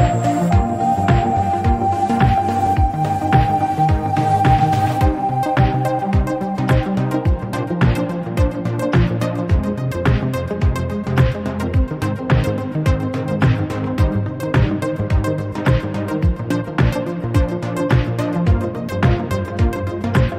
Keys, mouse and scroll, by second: 0.2 s, 3.4-5.0 drag, 5.4-7.0 shift+drag, 7.0-8.2 middle drag, 8.2-9.7 drag, 12.0-14.4 shift+drag, 15.4 Tab, 15.8 click, 16.1 Tab, 17.4 s.